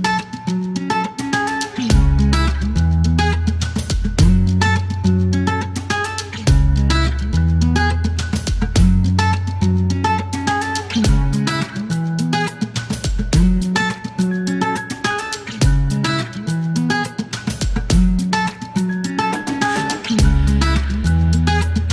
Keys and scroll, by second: 0.6 h, 3.2 alt+o, 8.7-9.6 typing, 11.5 t, 12.4 space, 14.5 alt+q.